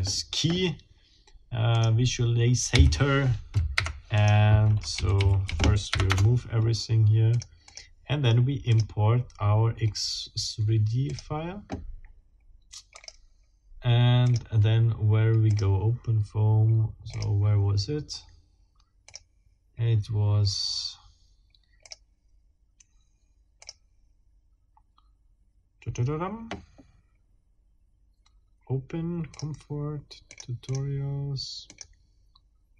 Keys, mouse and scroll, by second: 1.8 click, 2.7 a, 3.8 Delete, 4.2 click, 5.0 a, 5.9 Delete, 6.1 Return, 7.3 click, 7.6 click, 8.7 click, 11.0 click, 12.9 click, 14.2 click, 15.5 click, 17.1 click, 19.1 click, 21.8 click, 23.6 click, 29.3 click, 30.3 click, 30.6 click, 31.7 click.